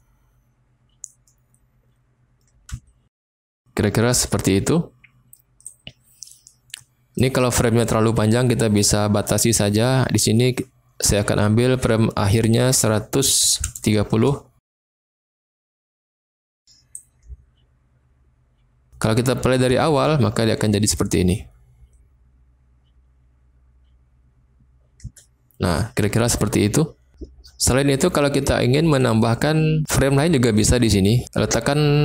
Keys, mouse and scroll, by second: 2.5 space, 2.7 space, 3.1 space, 5.7 click, 12.4-14.6 drag, 16.9-18.9 drag, 19.9 space, 25.0 space, 29.0-32.0 drag.